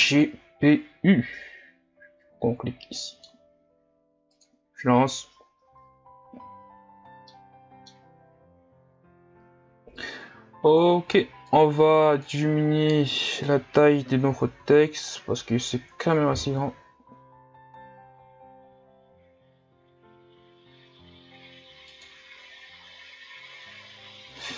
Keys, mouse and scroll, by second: 1.8-3.0 drag, 3.0-4.5 middle drag, 4.5-6.0 drag, 7.3-11.4 middle drag, 12.1-13.3 drag, 14.5 s.